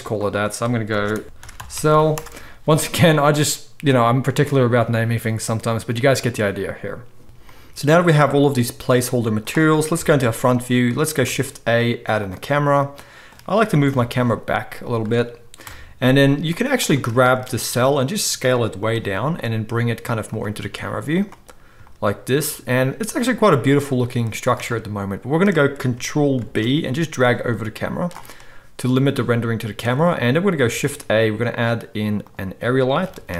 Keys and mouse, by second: 0.0 click, 0.1 middle click, 0.2-7.2 drag, 1.2 n, 1.9 l, 7.2 ctrl+l, 7.2 Tab, 7.2-8.5 middle drag, 7.2 g, 9.9 KP_1, 11.2 shift+a, 13.6 g, 15.6 KP_0, 16.8-33.3 shift+middle drag, 17.6 s, 18.9 g, 20.6 s, 26.4 ctrl+b, 30.7 shift+a, 33.0 g.